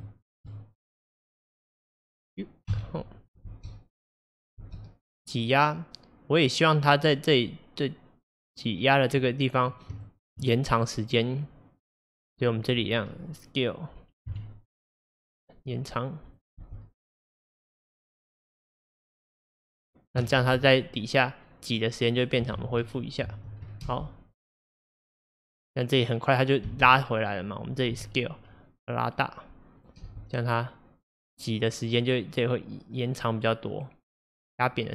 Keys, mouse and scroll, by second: 0.1 shift+middle click, 1.0 click, 2.7 Home, 3.5 space, 4.7 space, 5.3-8.3 drag, 10.1-12.3 shift+middle drag, 12.3-14.4 drag, 14.4 s, 16.6 space, 20.5 space, 21.0-22.6 drag, 22.6 ctrl+z, 23.4 ctrl+z, 23.9 space, 26.7 space, 28.0 s, 30.1 space.